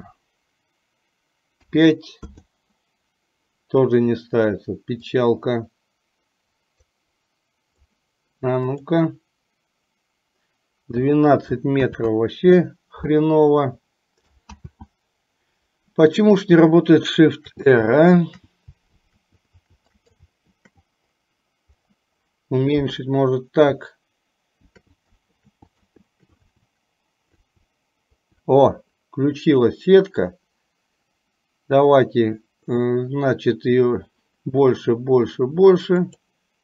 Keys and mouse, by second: 14.7 ctrl+z, 17.3-20.6 typing, 19.9 shift+click, 24.7 shift+r, 25.4 shift+r, 26.1 shift+r, 27.2 shift+r.